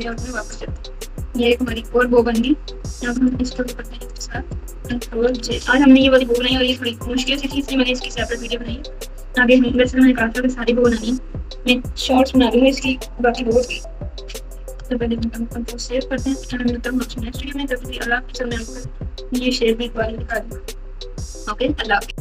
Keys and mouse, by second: 0.0 click, 3.1 click, 5.2 ctrl+j, 15.3 ctrl+s, 16.0 KP_6, 16.1 KP_6, 16.4 KP_6, 17.0 KP_Subtract, 17.2 KP_Subtract, 17.6 KP_2.